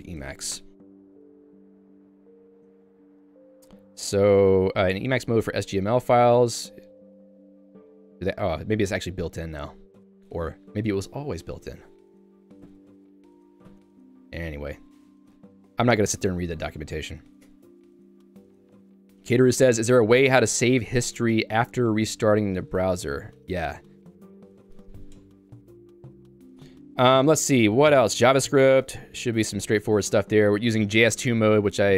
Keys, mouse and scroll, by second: 17.3 click, 17.5 Escape, 18.1 j, 28.0 k, 28.5 Tab, 28.9 End, 29.1 Home, 29.4 Tab, 29.8 j.